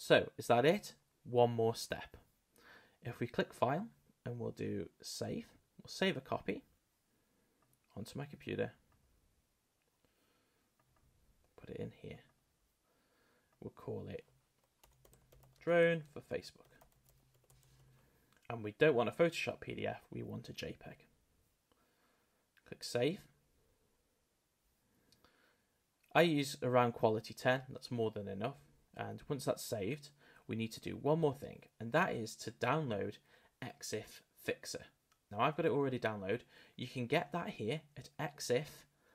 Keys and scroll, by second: 14.8 shift+d, 17.8 k.